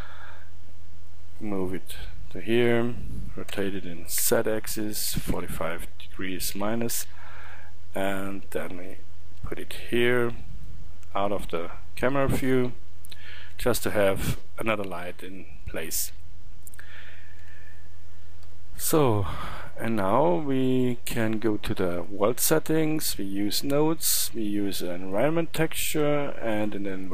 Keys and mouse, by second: 3.6 r, 8.2-10.1 drag, 13.6 KP_7, 17.5 KP_7, 18.5 KP_1, 19.9 click, 22.0-24.4 drag.